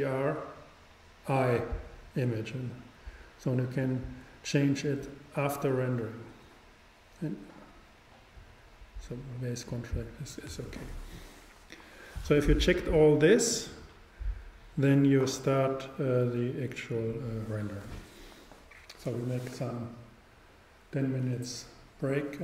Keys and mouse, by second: 5.0-9.8 drag.